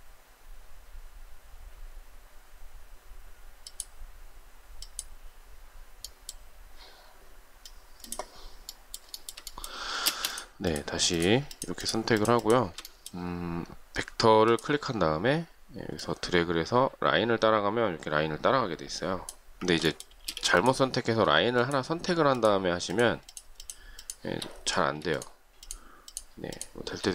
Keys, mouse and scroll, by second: 8.0 ctrl+z, 9.1 shift+middle click, 9.9 space, 11.3 shift+click, 11.5 shift+double click, 11.6 shift+click, 12.0 shift+click, 12.1 shift+double click, 12.2 shift+click, 20.1 space, 21.4 shift+click, 22.2 shift+click, 22.7 shift+click, 23.1 shift+click, 23.2 shift+double click, 23.5 shift+click, 23.8 shift+click, 24.0 shift+double click, 25.0 shift+click, 25.5 shift+click, 25.6 shift+double click, 25.9 shift+click, 26.4 shift+click.